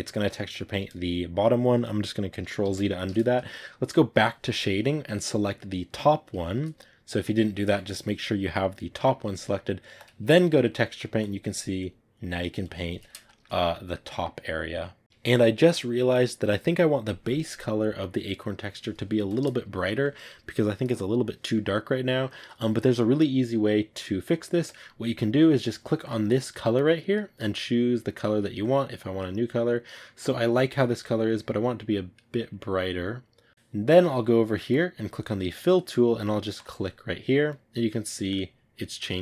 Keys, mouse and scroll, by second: 2.6 ctrl+z, 4.1 click, 5.3-8.0 right drag, 8.0-9.8 shift+middle drag, 9.8 click, 10.6 middle click, 11.1-12.9 drag, 12.9 ctrl+z, 13.1-25.5 shift+middle drag, 25.5 click, 26.9 click, 34.7-37.4 drag, 37.4-38.9 middle drag, 38.9 click.